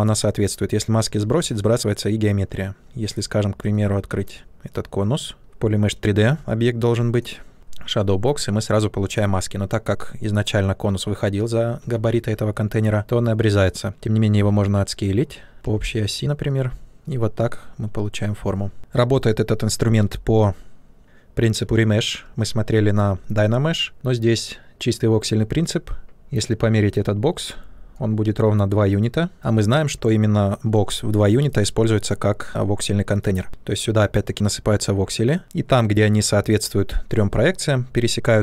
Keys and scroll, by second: 12.0 ctrl+z, 14.3 w, 15.5 q, 23.9 w, 29.8 q.